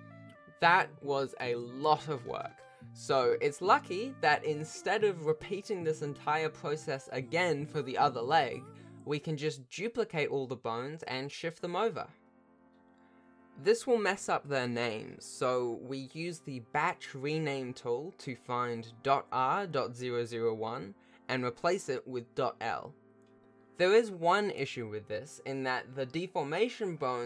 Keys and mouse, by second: 0.9 shift+click, 1.1 click, 1.4 click, 2.0 click, 2.2 shift+middle click, 3.8 ctrl+shift+click, 4.5 ctrl+alt+shift+a, 5.2 alt+a, 5.7 alt+a, 5.8 ctrl+s, 6.3 alt+a, 7.3 click, 8.5 ctrl+s, 8.7 a, 8.8 Tab, 9.4 a, 11.0 shift+d, 13.8 s, 14.8 shift+middle click, 15.4 F3, 20.5 o.